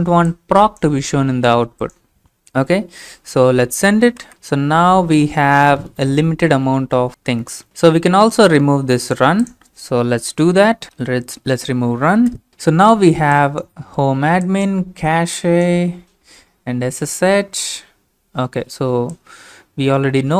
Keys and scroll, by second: 4.2 Return, 10.6-12.3 typing.